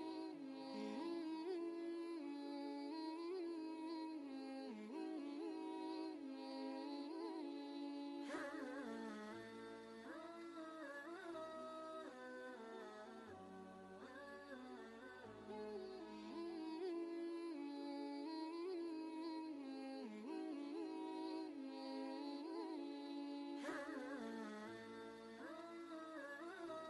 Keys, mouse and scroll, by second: 4.3 click, 6.4-7.0 scroll down 2, 10.4-10.9 scroll down 1, 12.0-12.3 scroll up 1, 13.1 right click, 14.4 click, 15.6 alt+Tab, 17.5 ctrl+v, 18.4-20.1 drag, 21.4 ctrl+shift+], 22.9 shift+click, 23.9 right click, 26.5 click.